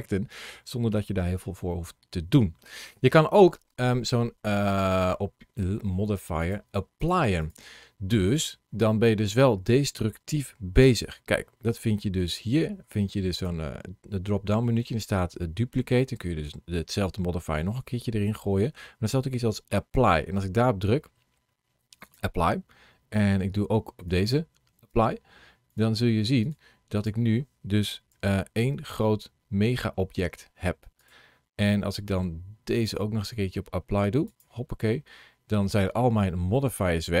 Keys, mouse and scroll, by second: 0.4-0.8 scroll up 2, 0.9 shift+middle click, 1.5 middle click, 4.7 click, 6.2 click, 8.8 scroll down 1, 11.0-11.7 scroll down 1, 13.2 click, 23.8 click, 25.5 click, 27.9 g, 30.8 right click, 32.6 click, 35.1-35.9 scroll up 2, 36.7-37.2 scroll down 1.